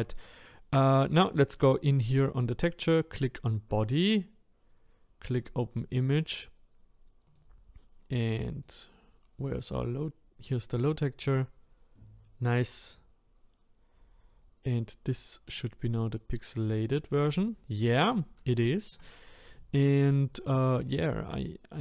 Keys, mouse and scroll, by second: 3.0 click, 5.4-10.9 drag, 15.5 click, 16.0-18.6 scroll up 3, 18.6 shift+middle click, 19.1-19.5 scroll up 3, 19.5 shift+middle click, 20.4-20.8 scroll down 1, 20.8-21.8 middle drag.